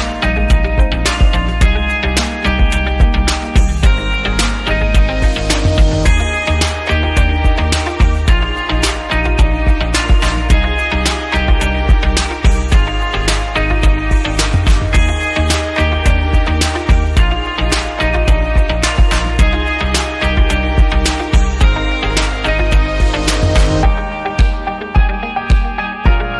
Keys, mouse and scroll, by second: 0.5 click, 1.4 click, 5.2 click, 5.4 click, 5.6 double click, 5.9 double click, 6.1 double click, 6.2 double click, 7.6 double click, 8.8 click, 11.2 click, 11.4 click, 12.4 click, 16.9 click, 18.4 click, 19.5 click, 19.9 click, 23.4 click, 24.4 click, 25.6 click.